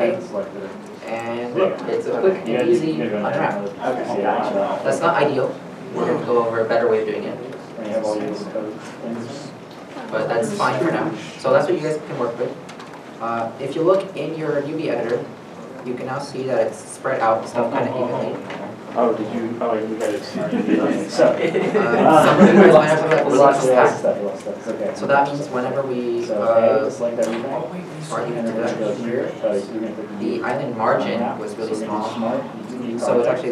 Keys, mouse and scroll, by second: 0.7 middle click, 7.4 shift+middle click, 9.3 shift+middle click, 9.3 middle click, 9.7 shift+middle click, 10.2 middle click, 12.6 scroll up 1, 14.1 shift+middle click, 14.3 scroll down 1, 15.7 a, 16.2 shift+middle click, 17.4 shift+middle click, 18.3 shift+middle click, 19.5 scroll up 1, 20.5 scroll up 1, 25.6 scroll, 27.6 u, 33.3 u.